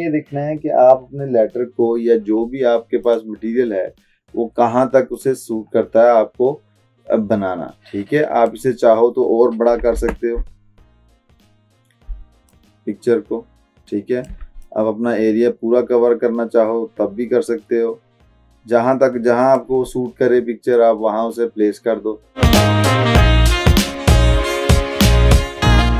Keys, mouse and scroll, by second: 3.3-8.7 drag, 10.0 ctrl+t, 12.6-14.4 shift+drag, 25.0 drag.